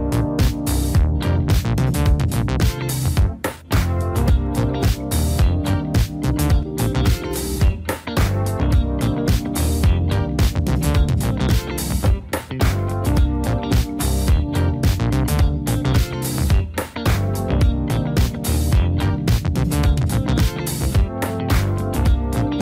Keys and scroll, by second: 1.5 typing, 10.4 typing, 11.2 Tab, 11.4 Right, 12.2 Down, 13.1 Right, 13.6 Down, 13.9 Down, 14.1 Down, 14.4 Down, 14.7 Down, 16.4 Down, 17.0 Down, 17.6 Down, 18.2 Down, 18.8 Down, 19.3 Down, 21.5 Down, 22.0 Up, 22.4 Up.